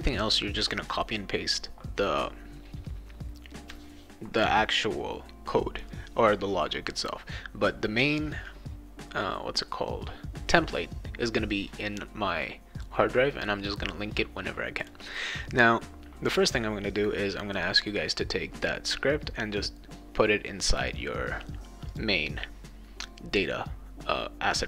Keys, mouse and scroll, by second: 6.9-8.0 drag, 12.0 click, 14.8 click, 21.8 click.